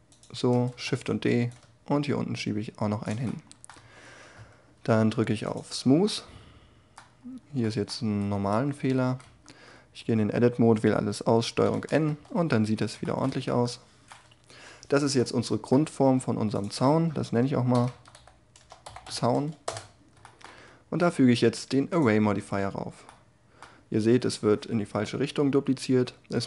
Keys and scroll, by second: 0.7 shift+d, 3.7 Tab, 8.2 Tab, 9.0 a, 11.5 ctrl+n, 12.0 Tab, 14.5 1, 17.7 shift+z, 19.6 Return.